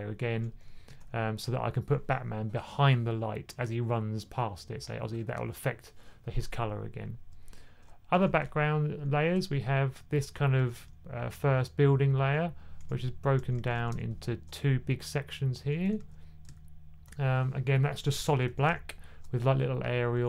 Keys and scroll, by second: 0.8 super+z, 8.0 1, 9.4 typing, 10.5 typing, 12.7-13.6 typing, 18.3 super+z, 18.5 super+z, 19.2 super+z, 19.8-20.2 typing.